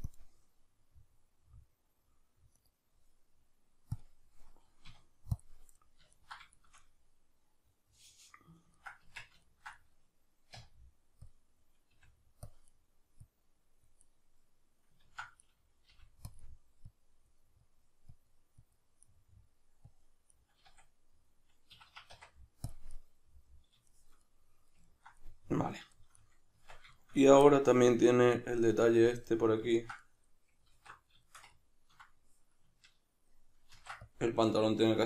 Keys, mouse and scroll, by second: 0.0-5.7 drag, 4.9 q, 6.1-12.5 ctrl+middle drag, 9.0 Tab, 10.5 q, 11.9 f, 12.5 click, 12.7 middle click, 13.3 click, 14.0-16.9 middle drag, 15.1 ctrl+z, 15.9 f, 16.9-19.0 drag, 19.0 middle click, 19.9 click, 20.3-35.0 middle drag, 20.7 a, 21.8 Escape, 22.1 q, 26.5 Tab, 30.7 alt+q, 33.7 ctrl+r.